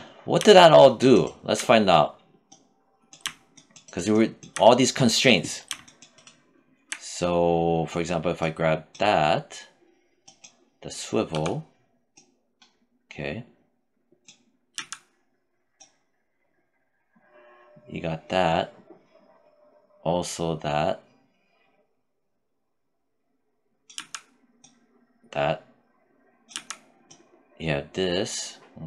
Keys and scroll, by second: 10.5 e, 14.0 z, 23.2 z, 25.7 z, 28.4 z.